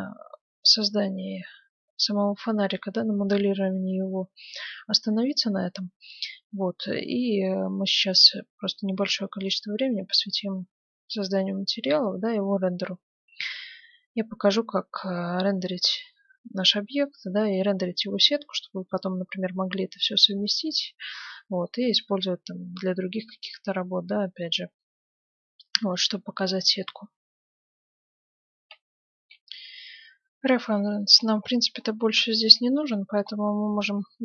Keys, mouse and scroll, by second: 20.6-22.5 middle drag, 23.6-25.3 middle drag, 28.7 F9, 31.1-32.8 right drag, 31.8-34.2 middle drag.